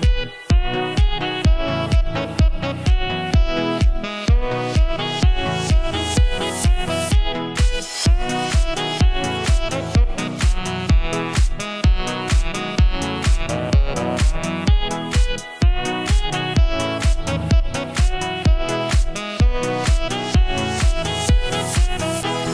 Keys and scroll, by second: 2.0-4.4 typing, 6.1-8.8 typing, 10.8 d, 11.9-13.4 typing, 18.8-22.5 typing.